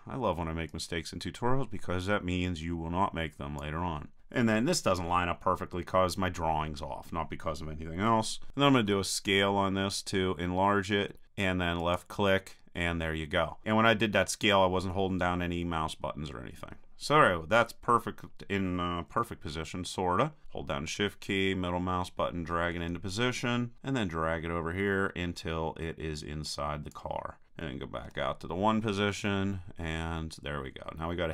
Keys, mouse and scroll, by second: 0.7-2.5 drag, 8.8 s, 11.9-13.6 drag, 19.2 KP_3, 20.7-21.7 drag, 23.7-25.5 drag, 28.1 KP_1, 29.4-30.9 middle drag, 30.9 click.